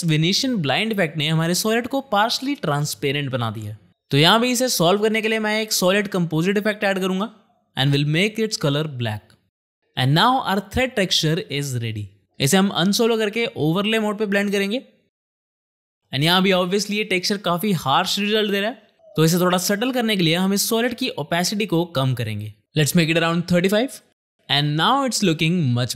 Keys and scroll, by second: 1.0 space, 5.0 ctrl+space, 5.2-6.3 typing, 6.7 Return, 18.1 space, 21.0 t.